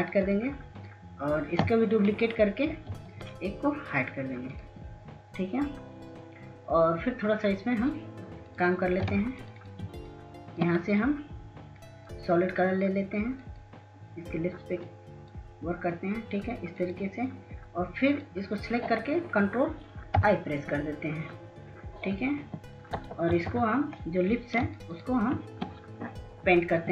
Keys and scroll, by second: 5.2 ctrl+j, 11.6 ctrl+space, 12.0 ctrl+space, 12.2 ctrl+space, 12.5-13.1 ctrl+space, 22.7 ctrl+i, 25.5 [, 25.7 [, 25.8 [, 26.0 [.